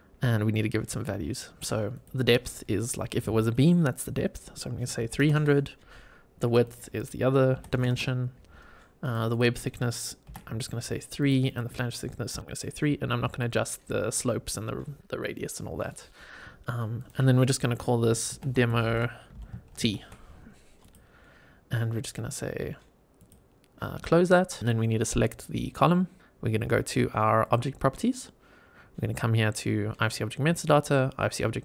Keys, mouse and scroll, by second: 0.1-1.1 scroll down 1, 1.1-1.9 scroll down 1, 1.9-6.4 drag, 5.3 KP_0, 6.6-8.9 drag, 7.8 KP_0, 9.2-11.2 drag, 11.4-13.3 drag, 16.9-20.7 drag, 21.2-23.1 scroll up 1, 23.1 click, 24.6 click, 27.3 click.